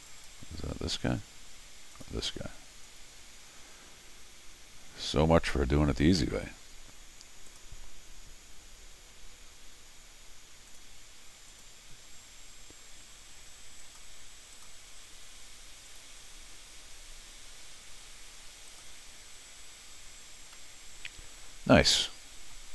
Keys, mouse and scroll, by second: 0.0 click, 0.2 click, 1.9 click, 2.8 click, 7.5 click, 10.7 click, 11.5 click, 13.8 click, 14.5 click, 15.9 click, 18.7 click, 20.5-22.5 middle drag.